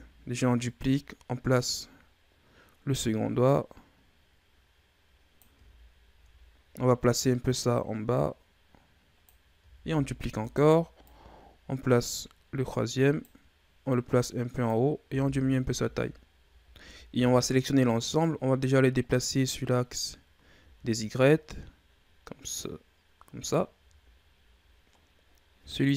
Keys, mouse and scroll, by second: 0.7-3.9 drag, 7.1-9.9 drag, 9.9 shift+d, 10.9-15.0 drag, 15.0 s, 16.6 z, 16.7 a, 17.0 a, 18.2-20.5 drag, 20.5 z, 22.5-23.6 drag, 23.6 z, 24.5 scroll down 1, 24.8-25.6 scroll up 2, 25.6 right click.